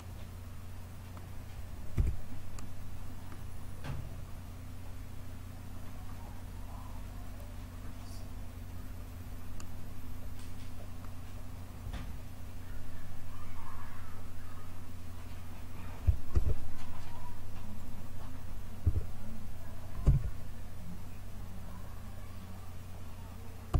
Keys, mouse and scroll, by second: 1.9 Tab, 7.1-9.6 drag, 16.3 shift+a, 18.8 s.